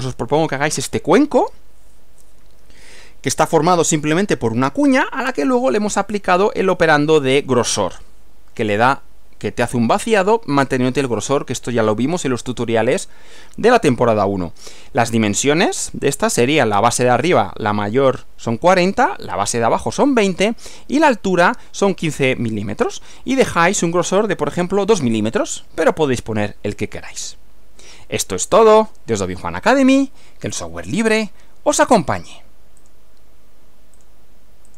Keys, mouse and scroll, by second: 15.0 Right, 32.9 click, 34.1 click, 34.7 click.